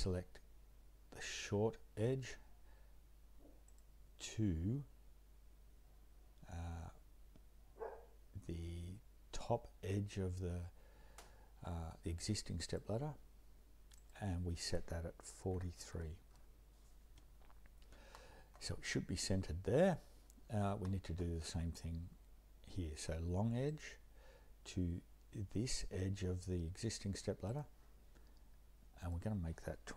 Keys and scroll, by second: 15.5-15.9 typing, 16.3 Return.